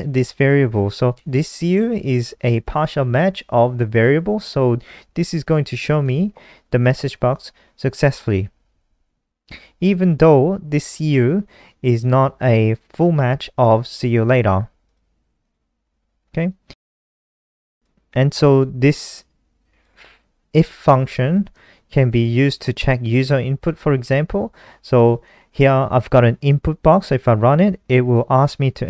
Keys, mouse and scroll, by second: 7.8 ctrl+s, 8.9 F5, 16.7 click, 17.6-18.0 scroll down 1, 18.8 click, 20.1 ctrl+c, 20.4 click, 21.0 click, 23.4 ctrl+v, 24.0 ctrl+s, 28.3 F5.